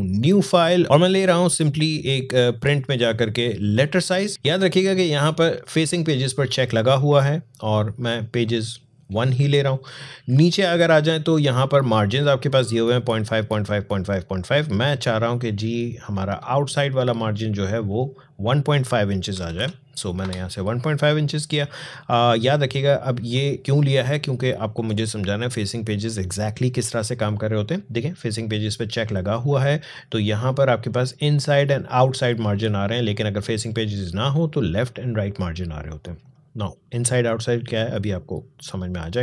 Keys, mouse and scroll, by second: 1.9 click.